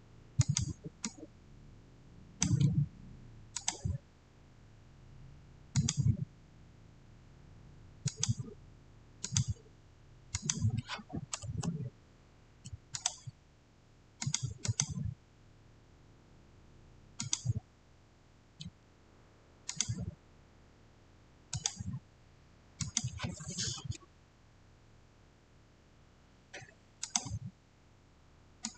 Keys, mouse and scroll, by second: 0.3-5.3 drag, 5.6 click, 7.9 click, 11.3 Return, 12.8 click, 17.0 click, 17.1 click, 19.6 click, 26.9 click.